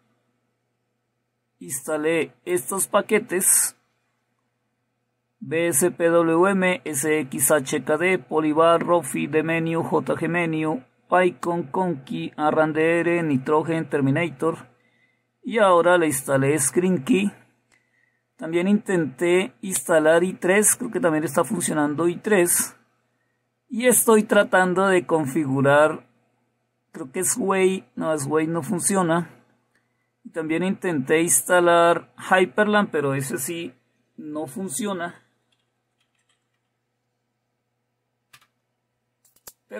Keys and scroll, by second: 36.3-37.6 typing, 38.8 Return.